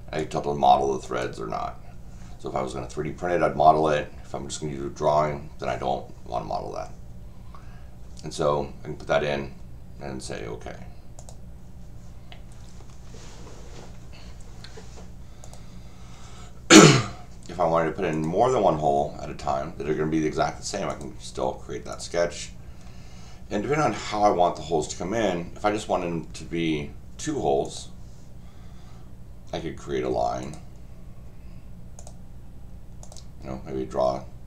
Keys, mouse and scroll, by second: 0.2 click, 1.0 click, 11.2 click, 12.9 middle click, 15.4 click, 18.1 click, 20.9 click, 21.9 click, 22.7 middle click, 27.6 click, 30.4 click, 32.0 click, 33.0 click.